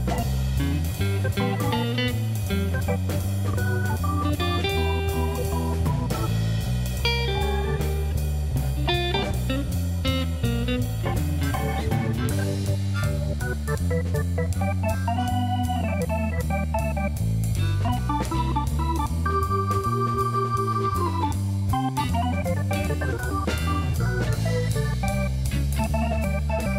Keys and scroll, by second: 0.2 Tab, 0.8 shift+s, 1.4 Tab, 1.6 shift+a, 3.3 Tab, 4.6 s, 7.8 g, 8.0 x, 11.5 3, 12.5 e, 18.3 3, 19.2 ctrl+b.